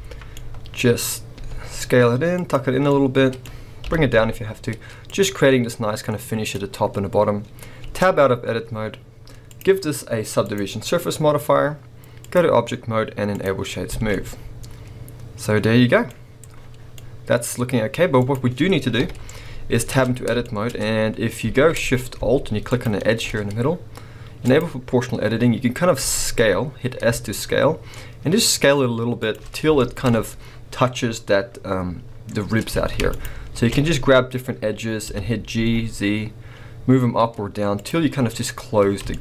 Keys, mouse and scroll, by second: 0.2 scroll down 1, 0.3-1.6 middle drag, 0.8-1.3 scroll up 1, 1.3 s, 2.5 click, 2.8 middle click, 3.8 g, 5.2 click, 5.4 scroll down 1, 5.7 middle click, 7.8 Tab, 7.8-9.5 middle drag, 9.5-14.1 drag, 13.6 scroll down 2, 13.9 alt+a, 14.1-18.2 middle drag, 16.0 scroll up 1, 18.0 scroll up 1, 18.2 click, 19.0 KP_1, 19.9 Tab, 20.4 shift+middle click, 20.7-21.5 scroll up 2, 21.5 alt+a, 22.6 alt+shift+click, 24.5 click, 26.0 s, 29.3 shift+click, 29.8 shift+middle click, 30.1-31.3 scroll up 1, 32.7 alt+a, 33.1 alt+shift+click, 34.2-35.0 scroll down 1, 35.0 g, 37.9 click, 38.9 scroll down 1, 39.1 shift+middle click.